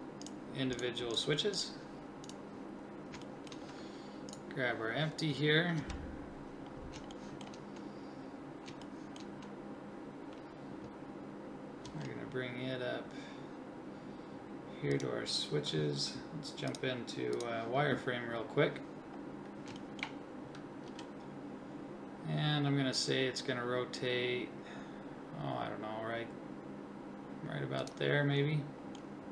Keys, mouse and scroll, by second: 5.8 KP_3, 11.8 g, 16.4 middle click, 18.3 click, 18.6-20.0 middle drag, 20.9 g, 21.2 click, 28.4-29.3 middle drag.